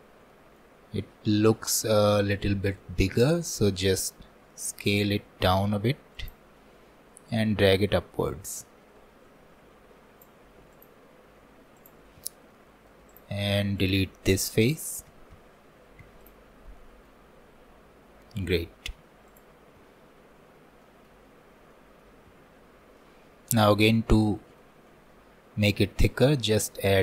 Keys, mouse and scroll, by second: 0.3-2.4 shift+middle drag, 2.4 scroll down 2, 2.8 shift+middle click, 3.3-3.7 scroll up 3, 3.7-4.7 shift+middle drag, 4.7 s, 8.9 click, 10.8-12.2 drag, 12.2 Tab, 12.7 shift+middle click, 13.1-15.1 drag, 15.1 x, 16.5 scroll down 2, 16.8-17.9 shift+middle drag, 17.9-18.4 scroll up 3, 18.4 shift+middle click, 19.3 click, 20.2 scroll up 2, 20.9-22.3 shift+middle drag, 22.3 Tab, 23.0 middle click, 23.9-24.2 scroll up 2, 24.2-27.0 shift+middle drag.